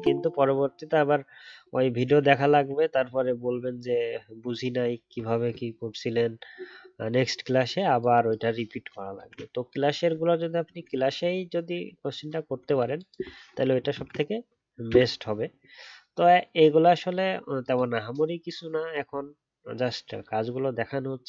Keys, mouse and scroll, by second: 9.1 ctrl+z, 13.9 ctrl+z.